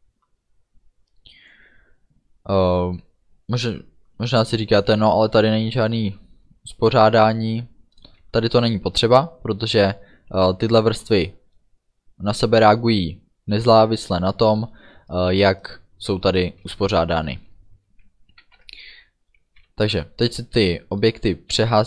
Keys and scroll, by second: 18.5 ctrl+s.